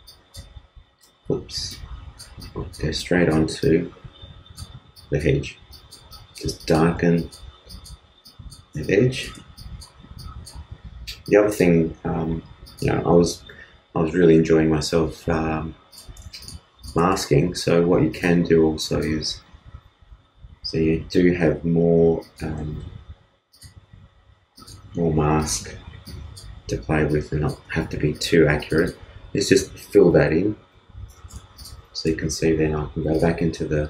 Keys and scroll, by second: 1.2 super+z, 30.0 alt+BackSpace, 30.7 alt+super+BackSpace, 31.1 alt+super+d, 31.3 super+space.